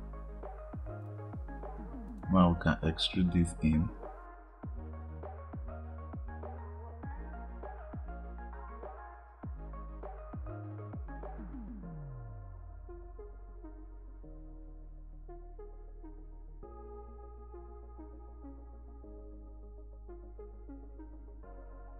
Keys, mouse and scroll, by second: 0.9 click, 3.3 click, 3.5 click, 3.8 click, 4.9 e, 5.9 click, 6.0-7.6 drag, 7.9 click, 8.5-10.0 drag, 10.3 click, 10.8 click, 11.4 click, 11.5 e, 13.4 click, 13.6 click, 14.6 ctrl+z, 14.7 ctrl+z, 14.9 ctrl+z, 15.0 ctrl+z, 15.4 click, 16.6 e, 19.0 click, 19.4 click, 20.0 click, 20.2 click, 20.5 click, 20.9 click, 21.0 click, 21.4 click.